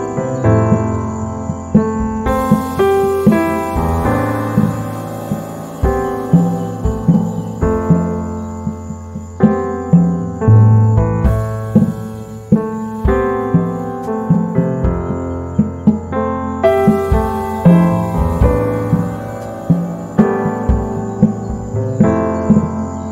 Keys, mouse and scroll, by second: 0.4 right click, 1.0 click, 3.4 z, 3.4-6.1 drag, 6.1 F9, 7.8 right click, 8.0 space, 10.0 click.